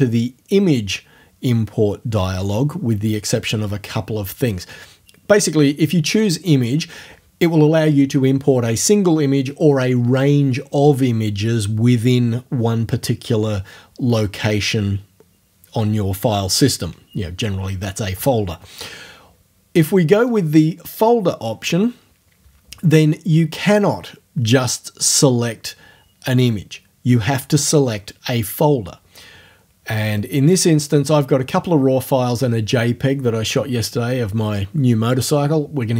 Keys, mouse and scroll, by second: 20.3 click.